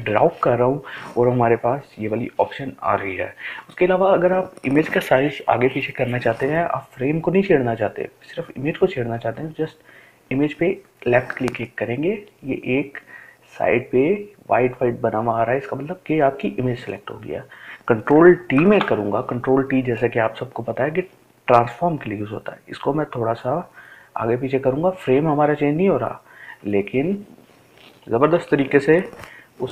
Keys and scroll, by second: 17.3 ctrl+t.